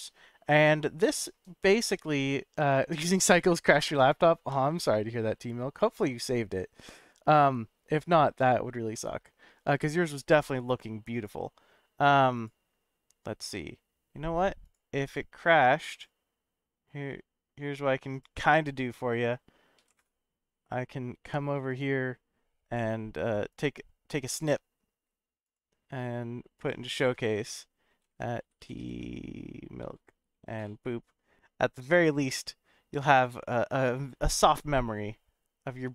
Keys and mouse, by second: 1.0 middle click.